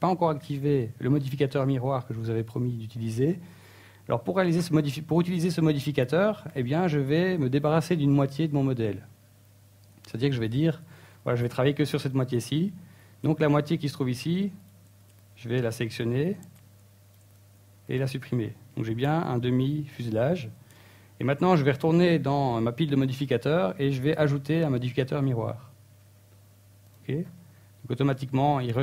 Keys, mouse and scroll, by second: 1.5 right click, 1.9 shift+right click, 2.3 e, 3.1 ctrl+right click, 3.4 ctrl+z, 3.5 right click, 4.1 shift+right click, 4.3 middle click, 5.1 scroll down 2, 5.3 middle click, 11.1-15.1 scroll down 2, 15.1 KP_1, 17.5 shift+middle click, 18.8 ctrl+Tab, 20.0 b, 21.0 a, 21.2 b, 22.3 x, 23.3 middle click, 24.1 middle click, 24.9 Tab, 25.5 shift+space, 27.9 click.